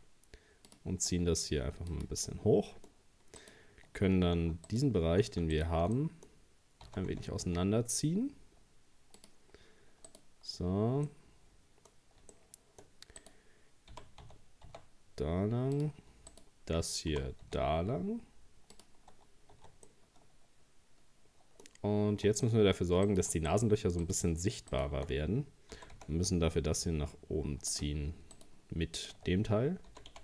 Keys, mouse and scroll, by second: 1.0 s, 2.3-3.4 middle drag, 3.4 right click, 4.7 alt+shift+right click, 5.5 alt+shift+right click, 6.0 middle click, 6.9 s, 10.1 right click, 11.1 middle click, 11.9-12.3 scroll up 1, 12.3 shift+middle click, 13.2 right click, 13.9 g, 16.3 right click, 17.1 g, 19.1-19.5 scroll down 2, 19.6 Tab, 19.9-21.8 middle drag, 21.8 scroll up 1, 22.1 Tab, 22.5 middle click, 23.1 right click, 23.5 shift+right click, 24.0 shift+right click, 24.7 shift+right click, 25.8 g, 28.4 shift+right click, 29.0 shift+right click, 29.9 g.